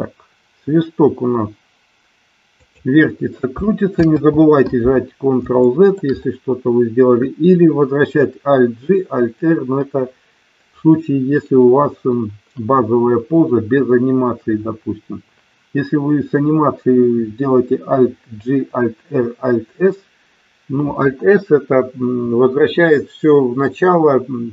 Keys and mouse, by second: 2.6 click, 4.0 ctrl+z, 5.6 shift+middle click.